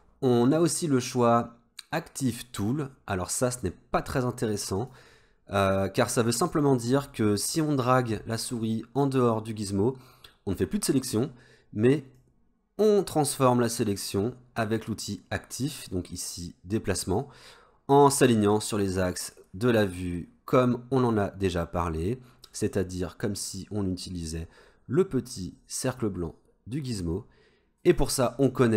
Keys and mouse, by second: 0.7-5.3 drag, 12.2-22.7 drag, 24.2-28.0 drag.